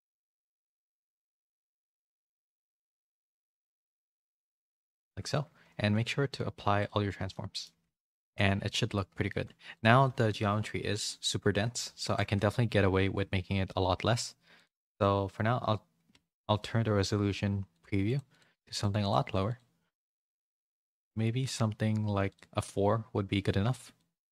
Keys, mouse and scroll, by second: 1.7 ctrl+z, 2.2 click, 4.3 click, 4.7 click, 5.7 ctrl+a, 7.3 middle click, 7.6 a, 7.8 a, 8.3 middle click, 9.2 shift+middle click, 10.7 KP_7, 12.0 shift+middle click, 12.3 z, 13.0 z, 14.5 click, 16.1 z, 17.7 click, 18.7 click, 19.0 click, 19.4 click, 23.9 middle click.